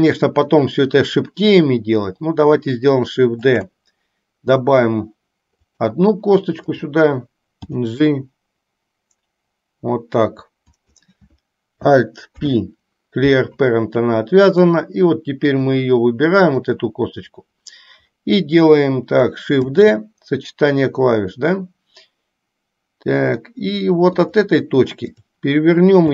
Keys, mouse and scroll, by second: 3.6 shift+d, 7.8 g, 12.4 alt+p, 16.7 click, 19.7 shift+d, 25.2 click.